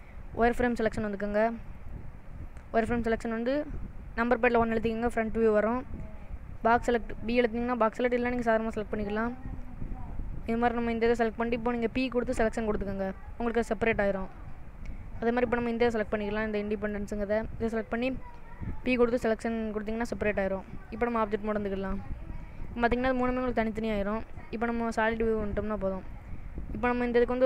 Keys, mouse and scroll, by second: 1.9 click, 4.0 KP_1, 7.7 b, 11.9 p, 14.0 click, 18.3 p, 20.9 click, 22.7 click, 23.4 click, 24.1 click, 25.3 click, 26.2 click.